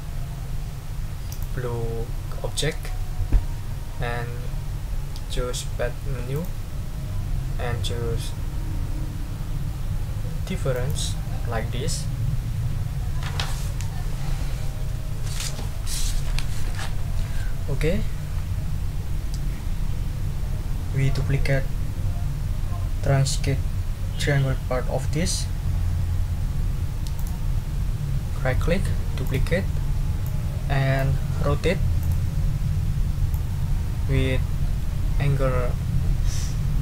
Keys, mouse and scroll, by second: 1.3 shift+click, 6.3 scroll up 2, 10.7 click, 27.2 right click, 29.2 click, 30.2 click, 32.0 click, 33.3-36.8 ctrl+drag.